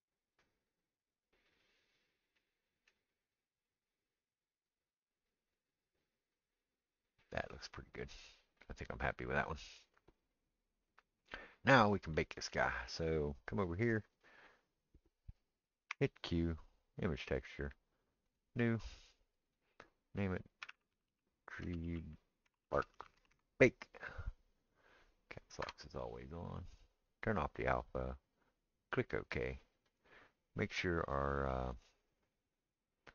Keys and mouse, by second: 5.6-18.3 middle drag, 15.9 q, 18.3-30.0 drag, 21.1 e, 30.0-31.6 middle drag, 31.6-33.1 drag.